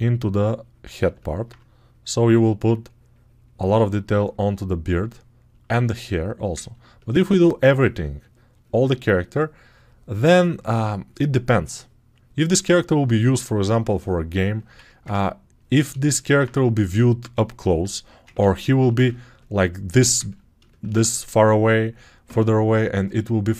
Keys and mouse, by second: 0.9 alt+click, 1.3-4.0 right drag, 4.0 ctrl+alt+click, 5.0 right click, 5.5 alt+shift+click, 5.9 right click, 6.0 alt+click, 6.9-14.3 right drag, 14.3 alt+click, 14.4 right click, 14.9-23.5 ctrl+drag.